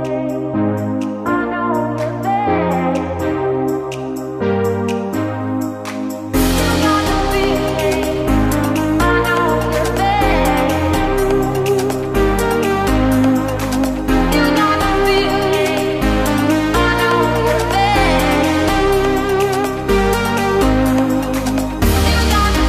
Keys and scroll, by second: 4.0 ctrl+space, 8.5 ctrl+space, 11.6 ctrl+space, 19.3 ctrl+space.